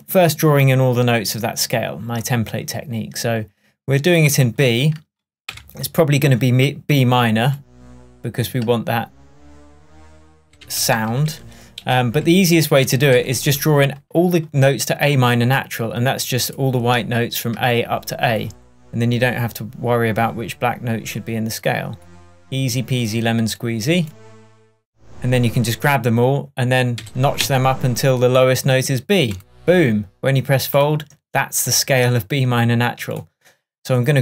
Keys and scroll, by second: 5.5 p, 10.5 super+Down, 14.2 Down, 27.0 Up.